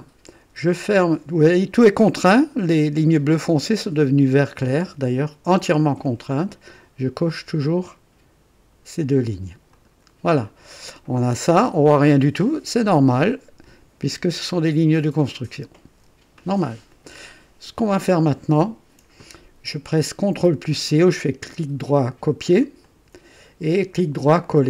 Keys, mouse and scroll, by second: 9.7 click, 21.0 right click, 22.8 click.